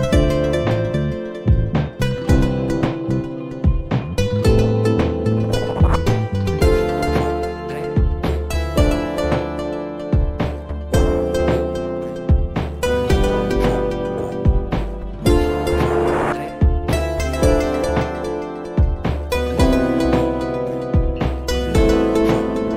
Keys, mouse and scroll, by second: 3.2 x, 4.6 scroll up 1, 4.7-6.5 middle drag, 6.5-9.5 drag, 10.7 alt+click, 11.9 alt+shift+click, 13.5 ctrl+z, 15.0-18.1 right drag, 18.1 Tab, 19.0-19.5 scroll down 1, 19.5-19.8 scroll up 1, 19.8-20.5 middle drag, 22.4-22.7 drag.